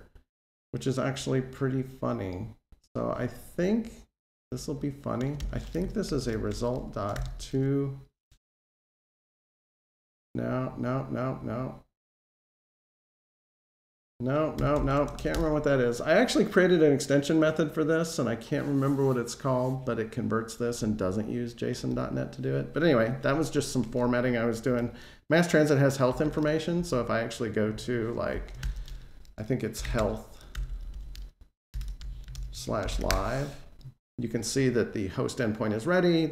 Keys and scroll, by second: 14.4 Escape, 15.1 Delete.